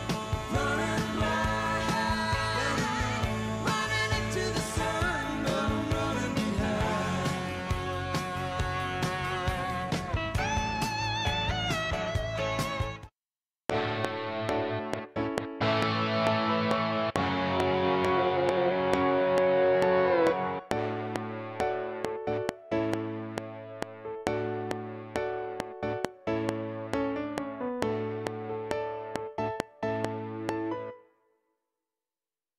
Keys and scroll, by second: 12.8 space, 28.6 ctrl+s, 30.8 space.